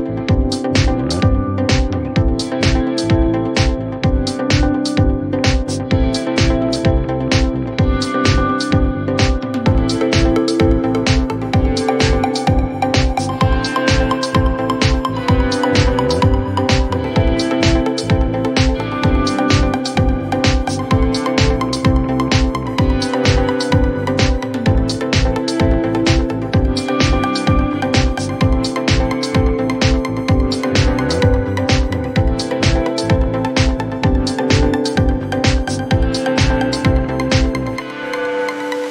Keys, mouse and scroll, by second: 1.3 click, 28.2 click, 33.5 click, 35.5 click.